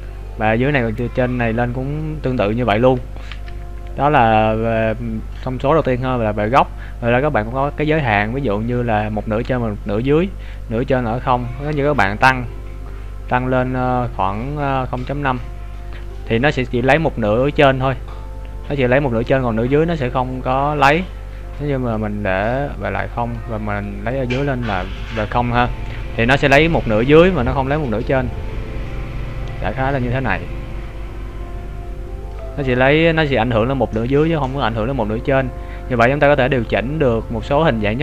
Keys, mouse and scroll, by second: 5.1-6.1 scroll down 3, 10.5 click, 14.3 click, 21.7 click, 27.7 click, 36.0 click.